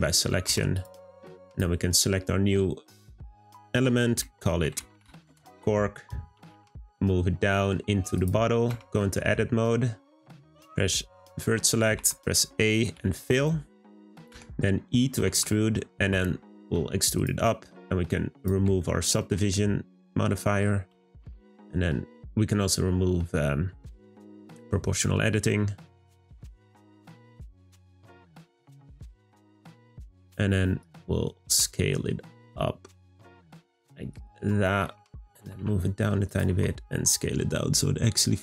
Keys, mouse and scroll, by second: 0.4 Tab, 0.7 click, 1.4 click, 2.9 click, 3.1-6.1 drag, 8.9-10.2 middle drag, 10.2 1, 18.3 click, 18.8-20.9 shift+middle drag, 20.9 g, 23.4 click.